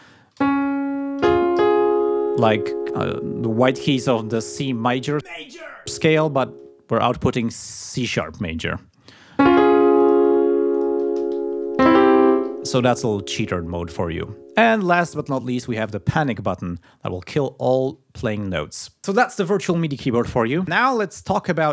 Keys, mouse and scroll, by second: 10.0 middle click, 10.7 middle click, 16.0 middle click.